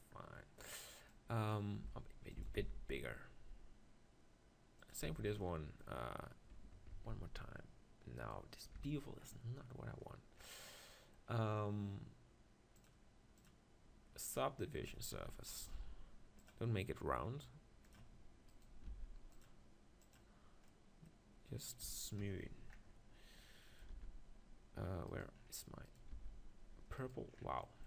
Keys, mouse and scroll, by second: 1.9 s, 2.4 s, 4.9-7.2 drag, 5.1 Tab, 6.9 ctrl+b, 8.8 Tab, 10.5 typing, 13.6-15.1 drag, 14.9 Tab, 15.5-17.2 right drag, 15.7 ctrl+r, 17.2 click, 17.9-19.8 drag, 18.5-19.8 right drag, 18.9 ctrl+r, 19.9 right click, 20.4-21.8 drag, 22.4-23.6 right drag, 23.6-25.2 middle drag, 23.9 ctrl+r, 25.2-27.7 right drag, 26.2 ctrl+r, 27.7-27.8 drag.